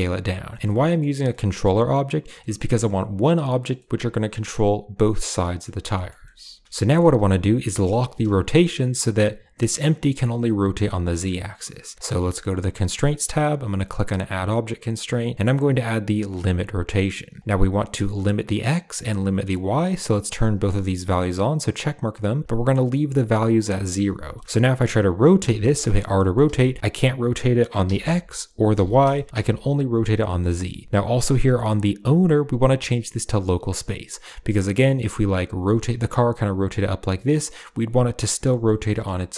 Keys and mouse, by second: 0.6 drag, 1.1 shift+click, 2.2 shift+drag, 2.3 shift+middle click, 2.4 click, 2.7 g, 3.6-4.0 drag, 4.5-5.0 drag, 5.0 middle click, 5.5 middle drag, 5.8 shift+middle drag, 6.1 shift+middle click, 6.5 shift+middle click, 6.7 shift+middle click, 7.6 r, 12.7 click, 14.0-16.4 drag, 17.2 shift+click, 19.9 click, 20.4 click, 24.2 shift+middle click, 25.3 r, 26.0 middle drag, 26.3 r, 30.1 middle drag, 30.3 r, 30.8 r, 32.3-34.5 drag, 34.9 middle click, 35.3 click, 35.5 r, 37.3 middle drag, 38.5 middle click, 38.8 shift+middle click.